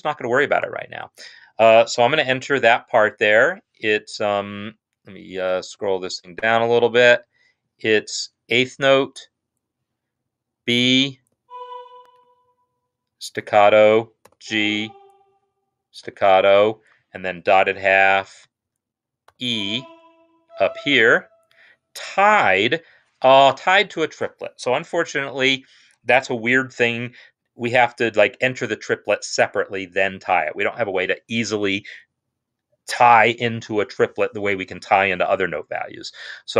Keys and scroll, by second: 2.2 n, 10.1-11.0 typing, 13.1 shift+s, 14.0 g, 15.9 shift+s, 16.9-20.7 typing.